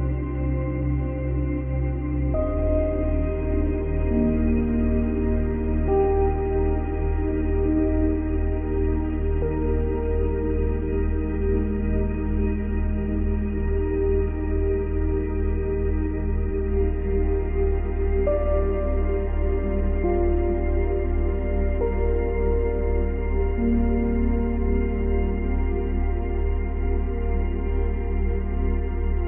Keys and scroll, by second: 1.2 space, 12.1 space, 13.5 space, 16.0 space, 17.0 space, 21.4 space, 25.1 space.